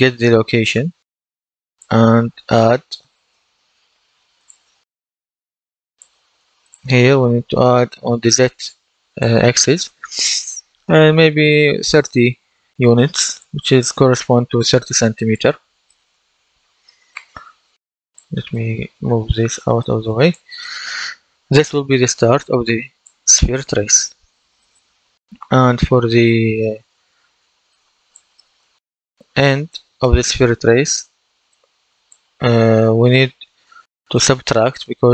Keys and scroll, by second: 3.1 shift+=, 11.7 KP_3, 12.0 KP_0, 12.8 Return.